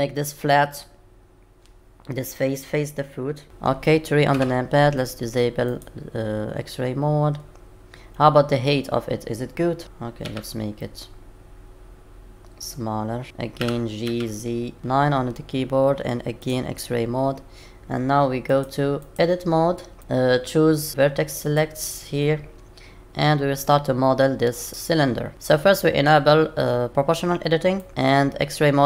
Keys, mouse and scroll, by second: 3.4 middle click, 4.3 KP_3, 5.7 click, 6.6-7.4 scroll up 2, 9.8 KP_3, 10.2 s, 13.6 g, 14.8-15.3 scroll down 1, 14.8 KP_9, 16.4 click, 18.5 click, 19.0 click, 20.0 Tab, 21.4 click, 27.8 click.